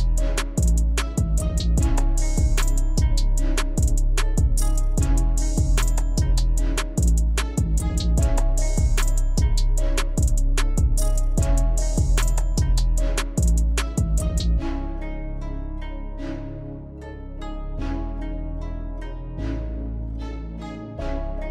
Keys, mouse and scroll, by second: 0.9-1.5 typing, 5.5 typing, 6.9-11.8 drag, 13.8-15.0 typing, 16.0-18.7 drag, 18.7-19.2 typing, 19.3 click, 20.3 alt+scroll up 2, 21.0-21.5 typing, 21.3 click.